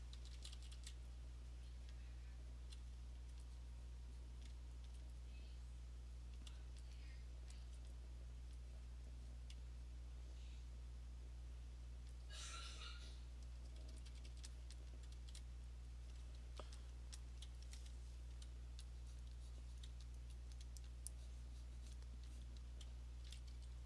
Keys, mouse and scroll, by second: 0.0 click, 0.2 [, 0.4 [, 0.5 [, 0.8 [, 1.9 click, 2.7 click, 3.2 alt+click, 3.3 alt+click, 4.5 click, 4.9 alt+click, 6.4 click, 6.9 alt+click, 7.6 alt+click, 8.4 click, 8.9 click, 11.7 click, 11.8 click, 12.9 click, 13.7-15.1 typing, 14.6 click, 14.9 click, 15.8 click, 16.1 click, 16.9 alt+click, 17.0 alt+click, 17.3 click, 17.7 click, 19.2 click, 19.8 click, 20.2 alt+click, 22.0 click, 22.4 click, 23.3 ], 23.5 ].